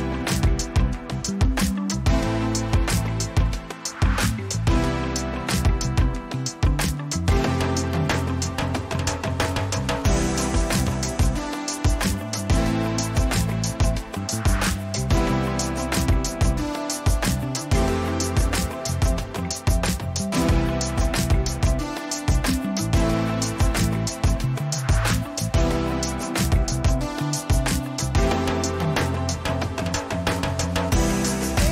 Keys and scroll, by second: 1.2 space, 4.7 Return, 12.9 ctrl+t, 19.7 Return, 20.5 space, 22.1 Return, 29.4 ctrl+alt+z.